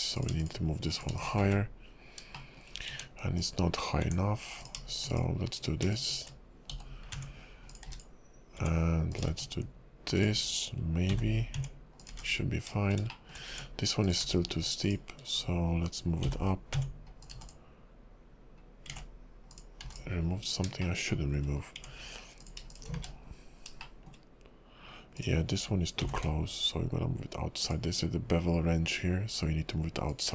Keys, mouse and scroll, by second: 0.1 click, 0.4 shift+click, 0.9 click, 1.2 shift+click, 1.7 1, 2.3 shift+middle click, 2.9 Tab, 3.4 click, 4.0 Tab, 4.6 click, 5.1 shift+click, 5.9 click, 6.9 j, 7.6 Tab, 7.7 click, 7.8 x, 8.6 Tab, 9.1 click, 10.2 shift+click, 11.2 j, 11.6 Tab, 12.0 click, 12.1 x, 13.1 shift+middle click, 13.4 Tab, 14.0 click, 14.8 shift+click, 15.4 scroll down 2, 16.4 j, 16.8 Tab, 17.2 click, 17.3 x, 19.1 ctrl+z, 19.5 click, 19.8 x, 20.4 scroll down 2, 20.8 shift+middle click, 21.5 scroll up 3, 21.8 Tab, 22.4 click, 22.7 shift+click, 23.3 1, 23.7 scroll down 2, 23.8 shift+middle click, 24.1 shift+click, 25.2 click, 26.0 g, 30.1 click.